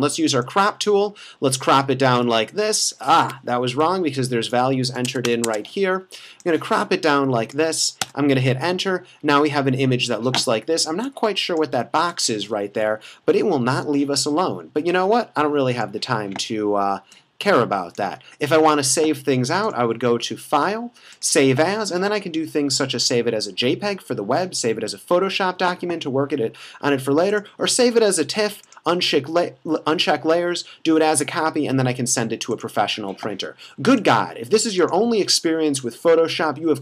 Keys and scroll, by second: 3.2 Escape, 5.0 BackSpace, 5.1 Tab, 8.1 Return, 12.9 v.